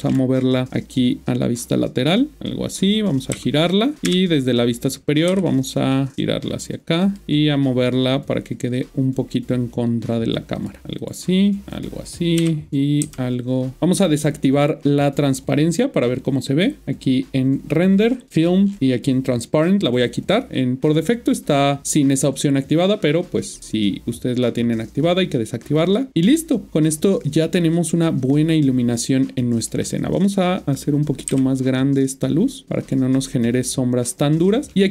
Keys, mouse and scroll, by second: 0.7 g, 2.3 click, 3.3-4.0 typing, 4.0 click, 7.0 typing, 7.0 click, 10.5 click, 10.8 typing, 11.0 click, 12.4 typing, 13.8 click, 16.8 click, 18.0 scroll down 4, 18.3 click, 18.6 scroll down 1, 19.9 click, 25.8 click, 29.6 click, 31.3 s, 32.8 click.